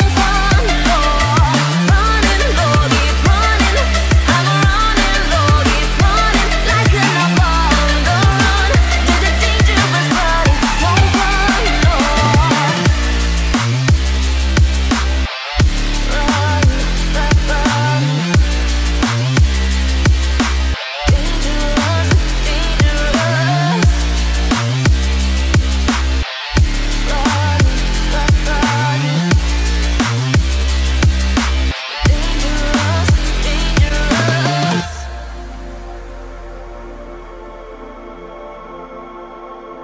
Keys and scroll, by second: 3.1 ctrl+g, 4.1 ctrl+alt+shift+e.